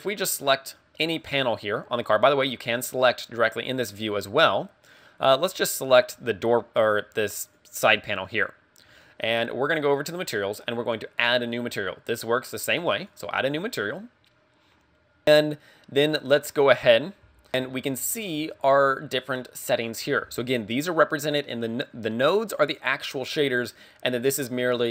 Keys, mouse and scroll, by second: 1.1 right click, 2.4 scroll up 2, 4.4 scroll up 2, 4.5 middle click, 8.1 right click, 8.2 middle click, 10.1 click, 13.0 click, 14.0 click, 17.5 Return.